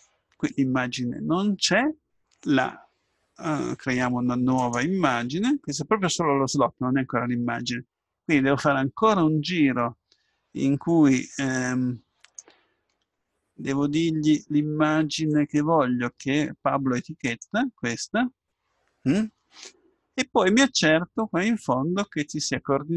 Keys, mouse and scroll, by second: 4.6-6.5 drag, 13.2-15.3 middle drag, 15.3-17.2 drag, 19.7-22.9 middle drag.